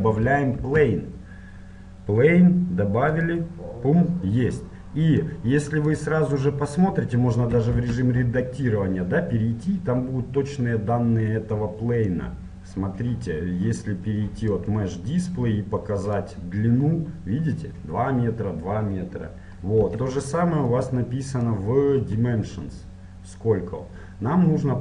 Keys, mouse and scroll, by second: 0.6 shift+a, 0.9 middle click, 1.1 middle click, 5.3-7.1 drag, 7.8 Tab, 12.2-13.9 drag, 16.1-17.9 drag, 17.9-20.8 middle drag, 19.9 Tab, 20.8-22.6 drag.